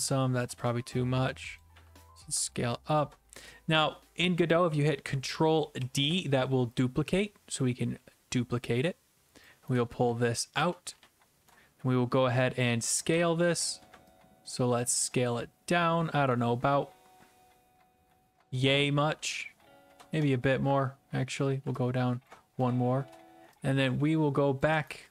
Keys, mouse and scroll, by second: 1.6 click, 1.7 q, 3.0 ctrl+click, 5.8 ctrl+d, 9.4 click, 9.5-11.5 typing, 11.5 right click, 12.6-13.1 typing, 18.5 ctrl+click, 19.2 typing, 20.2-21.1 typing, 22.3 ctrl+click, 22.3-23.1 typing, 24.6 ctrl+click, 24.9-25.1 typing.